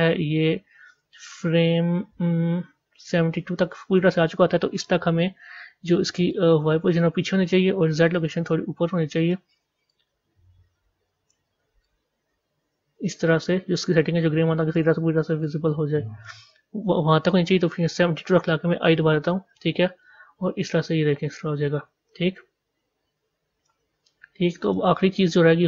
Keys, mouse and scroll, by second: 6.3-18.7 drag, 20.0-23.0 drag, 24.6 click.